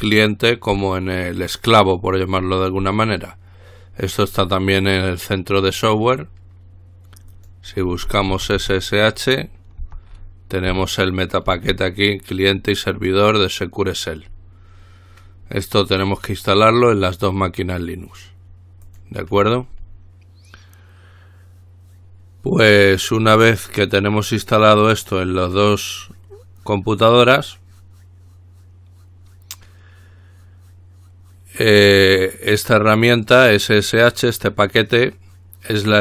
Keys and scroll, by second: 0.0-0.3 typing, 2.7 typing, 8.5-8.8 typing, 10.0 typing, 12.2 typing.